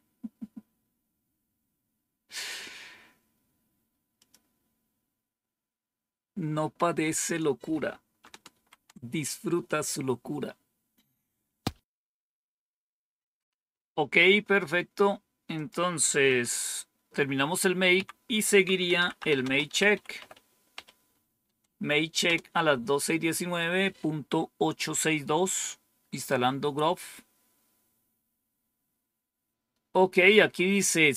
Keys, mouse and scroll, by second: 4.0 click, 8.4 ctrl+-, 15.4 click, 16.1 Up, 17.8 Down, 18.5-20.6 typing, 22.1 Return.